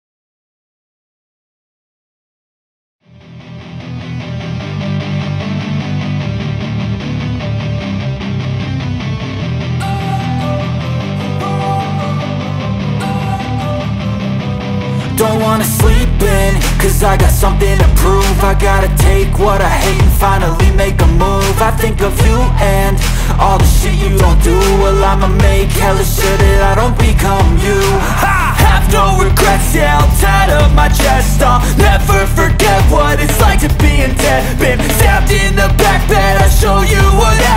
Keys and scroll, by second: 0.7 space, 1.0 e, 5.5 space, 6.0 p, 7.0 Return, 9.8 r, 13.4 Return, 13.8 space, 14.7 m, 15.4 Right, 16.7 space, 17.1 p, 18.6 Return, 22.2 p, 23.0 space, 26.1 r, 27.8 space, 28.2 p, 29.3 Return, 30.2 space, 32.9 r, 36.9 space, 37.2 e.